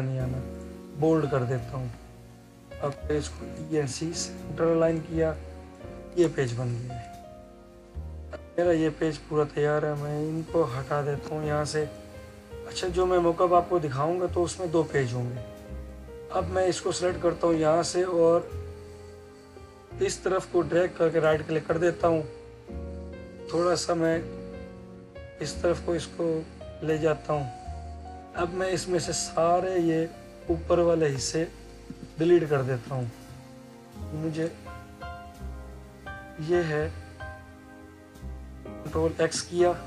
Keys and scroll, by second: 39.0 ctrl+x.